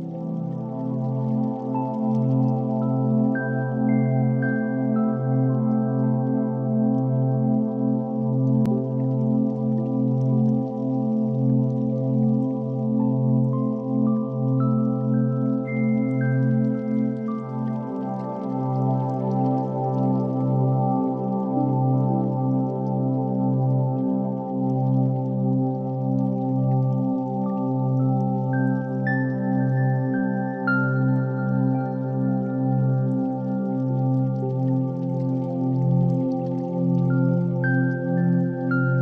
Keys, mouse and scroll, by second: 3.1-3.4 middle drag, 3.6 ctrl+3, 4.1-4.5 middle drag, 4.5 Tab, 5.4 2, 6.1 ctrl+r, 6.8 right click, 7.1 ctrl+b, 10.1 click, 10.6 Tab, 11.6-12.4 middle drag, 12.6 click, 13.4 KP_1, 16.1 r, 16.8 z, 21.4 -, 21.5 9, 21.6 0, 21.9 Return, 23.4 shift+a, 25.7 ctrl+3, 28.0 /, 29.2 Tab, 30.7 3, 31.1 middle click, 31.8 click, 32.6 KP_1, 33.7 g, 34.1 x, 35.0 click, 35.3 s, 37.8 s, 38.9 shift+click.